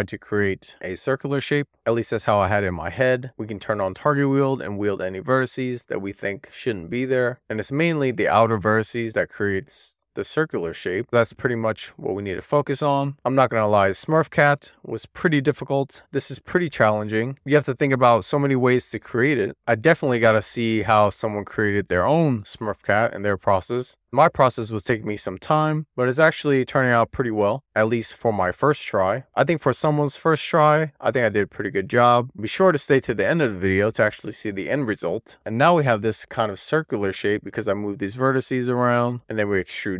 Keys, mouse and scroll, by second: 0.1 super+z, 0.5 d, 0.6 super+z, 0.7 click, 1.2 g, 3.5 super+z, 3.9 alt+q, 4.0 click, 4.3 super+z, 4.5 Tab, 4.7 alt+q, 5.1 Tab, 6.5 Tab, 6.8 Tab, 7.1 Tab, 7.1 alt+q, 7.2 Tab, 7.4 click, 7.7 g, 8.1 click, 8.3 g, 9.5 click, 9.9 g, 10.8 shift+middle click, 10.9 shift+scroll down 1, 11.0 scroll up 2, 11.2 click, 11.7-12.1 click, 12.3 click, 12.8-13.2 scroll down 3, 13.2 middle click, 13.7-14.5 scroll up 2, 14.0 middle click, 14.5 middle click, 14.6 click, 15.2 middle click, 15.5 middle click, 16.2 middle click, 16.4 click, 16.9 middle click, 17.2 click, 17.5 alt+q, 17.6 Tab, 17.8 middle click, 18.0 Tab, 18.5 middle click, 19.5 middle click, 19.8 click, 20.5 1, 20.6 middle click, 20.9 middle click, 21.3 scroll down 1, 21.4 middle click, 22.2 click, 22.7 Tab, 22.9 middle click, 23.3 middle click, 24.0 shift+middle click, 24.3 click, 24.4 click, 24.6 super+z, 24.8 Tab, 25.1-25.8 click, 25.8 click, 26.4 x, 26.6 click, 26.9 click, 27.2 click, 27.4 middle click, 28.1 middle click, 28.5 super+z, 28.8 click, 29.3 scroll down 1, 29.6 scroll up 10, 29.8-30.2 scroll down 1, 30.2 super+z, 30.3 middle click, 30.9 middle click, 31.4 click, 31.5 super+z, 31.7 middle click, 31.8 click, 32.2 middle click, 32.4-32.8 scroll down 1, 32.8 middle click, 33.1 middle click, 33.4 Tab, 33.5 middle click, 33.6 Tab, 33.9-34.9 middle drag, 35.0 Tab, 35.1 middle click, 35.5-36.1 scroll up 1, 36.3 d.